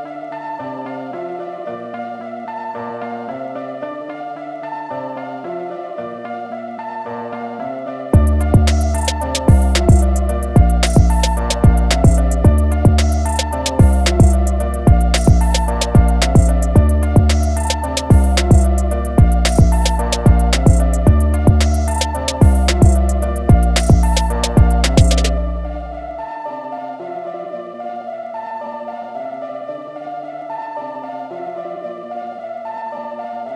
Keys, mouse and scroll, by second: 1.4-2.0 alt+scroll down 2, 2.7-4.9 alt+scroll down 2, 9.6 scroll up 1, 14.7 click, 18.7 scroll up 1, 19.9 click, 21.9 click, 22.5 click, 22.9 scroll down 2, 23.5 scroll down 1, 24.1-24.9 alt+scroll down 2, 25.3 ctrl+a, 26.3 shift+m, 27.3 click, 29.1 ctrl+z, 32.8 alt+scroll up 2.